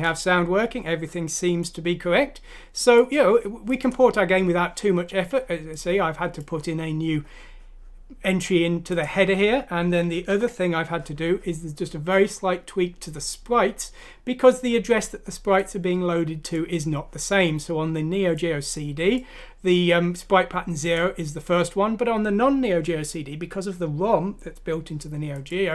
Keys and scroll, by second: 10.3 ctrl+End.